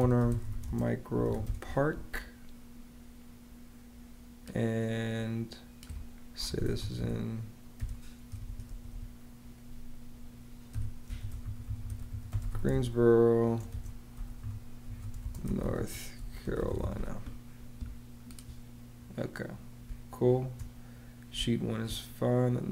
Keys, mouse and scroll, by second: 0.0-2.4 typing, 6.2-8.2 typing, 10.8-17.2 typing, 19.7 space, 21.2 space.